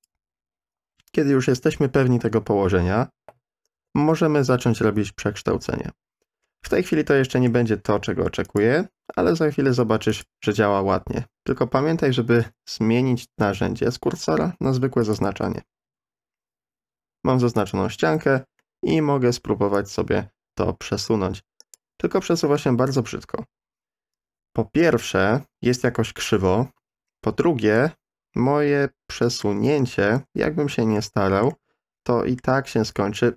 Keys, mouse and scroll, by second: 3.7 n, 6.9 middle click, 8.4 click, 10.2 click, 17.7 click, 18.6 middle click, 19.8-21.7 drag, 22.6-27.7 middle drag, 29.2 middle click, 30.0 ctrl+z, 31.0 middle click, 31.5 middle click, 33.2-33.3 drag.